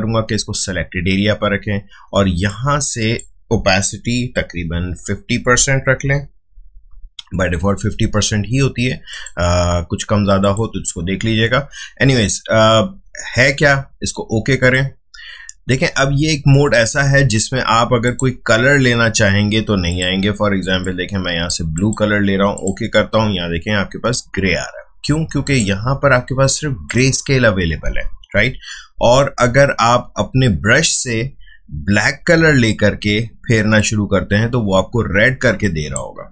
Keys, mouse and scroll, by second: 2.4-5.8 drag, 6.5 typing, 9.1 click, 14.6 click, 18.0 click, 25.4 click, 28.3 d, 33.7-36.3 drag.